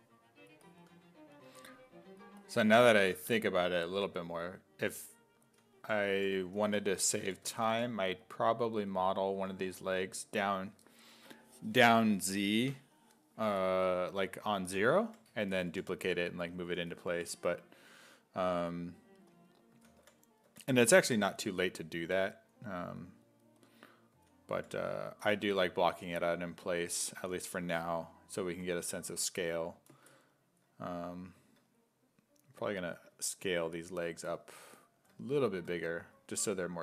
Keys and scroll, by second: 0.9 2, 1.6 2, 5.2-8.2 typing, 9.5 2, 14.5-17.1 typing, 19.5-21.0 typing, 24.1 s, 24.6 5.